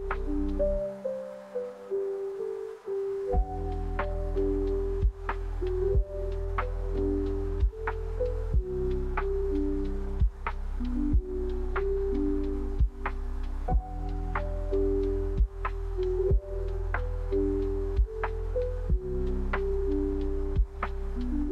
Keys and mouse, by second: 9.3 Tab, 9.3 a, 12.3-14.5 shift+drag, 16.6-17.6 shift+drag.